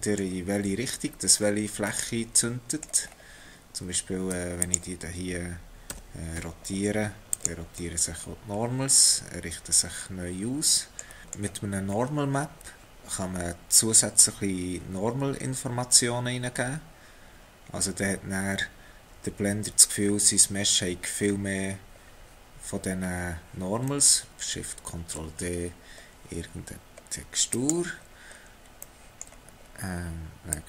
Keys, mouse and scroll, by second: 1.9 middle click, 3.1-4.4 scroll down 2, 4.4 3, 4.6 click, 5.9 r, 7.8 middle click, 11.2 middle click, 11.8 scroll down 1, 11.9 scroll up 2, 23.9 middle click, 24.3 click, 25.3 ctrl+shift+d, 28.1-28.6 scroll up 4, 28.8 middle click, 29.6-30.5 scroll up 2, 30.5 click.